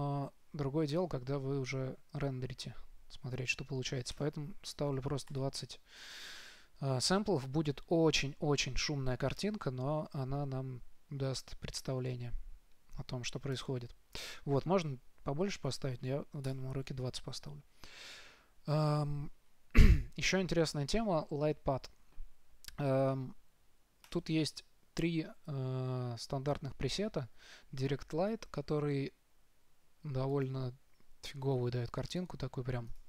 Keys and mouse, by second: 1.2-3.1 drag, 4.4-6.3 drag, 13.9-15.7 drag, 24.4-31.3 drag, 32.4-33.0 drag.